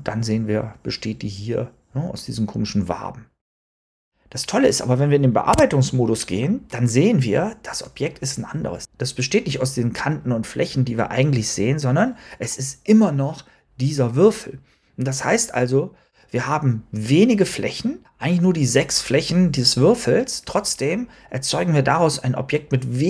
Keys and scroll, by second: 5.4 Tab.